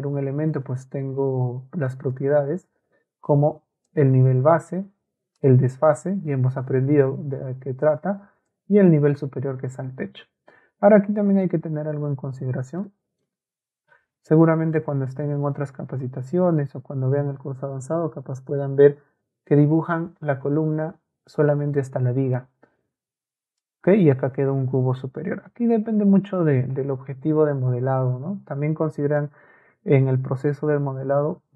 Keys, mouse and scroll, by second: 0.5-2.1 ctrl+drag, 3.9-5.4 ctrl+drag, 8.5-9.6 ctrl+drag, 10.5 Escape, 12.8-13.2 scroll up 2, 13.8 ctrl+a, 14.8-16.0 ctrl+drag, 21.7-23.6 ctrl+middle drag.